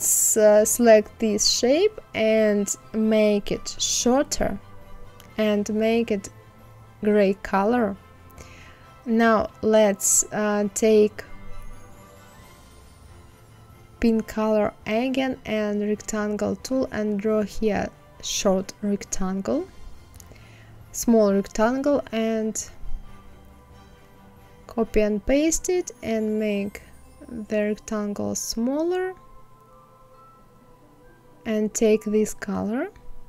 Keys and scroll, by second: 1.0 ctrl+f, 22.6 ctrl+c, 23.2 ctrl+f.